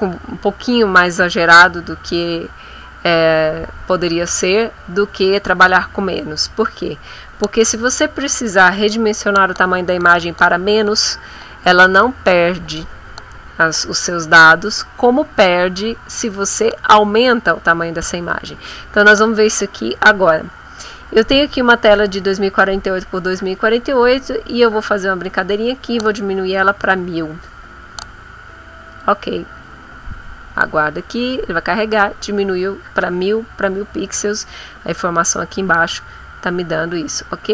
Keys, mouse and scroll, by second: 19.2 click, 25.3 click, 26.3-27.3 typing, 28.9 click.